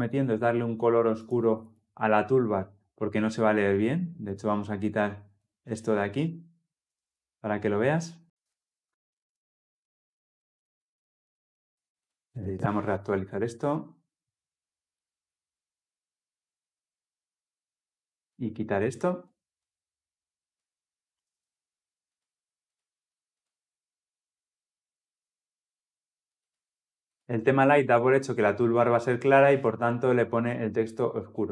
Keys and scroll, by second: 9.7 ctrl+F10, 12.0 shift+F10, 23.3 shift+F10.